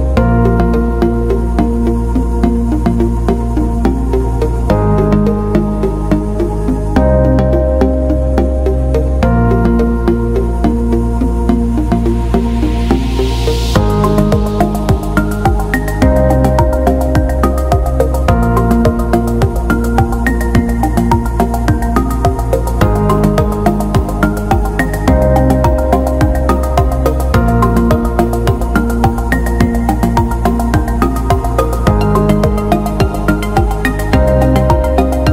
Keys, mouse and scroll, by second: 4.2 scroll down 1, 4.7-5.7 scroll down 1, 5.9-6.3 scroll down 1, 13.9 click, 21.7 scroll down 1, 22.6 click, 23.1 F3, 23.7 click, 26.3 ctrl+click, 27.7 alt+BackSpace, 28.7 ctrl+d, 29.6 click, 31.7-32.3 scroll up 1, 32.3 click, 34.6-35.3 alt+scroll up 1.